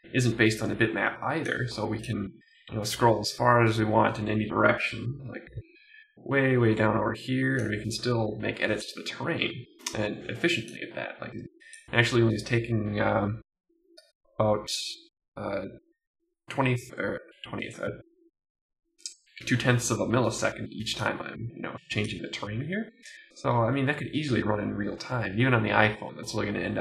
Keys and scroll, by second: 0.7 Right, 2.2 Down, 2.4 Left, 2.8 Down, 24.9 Right, 25.0 Up.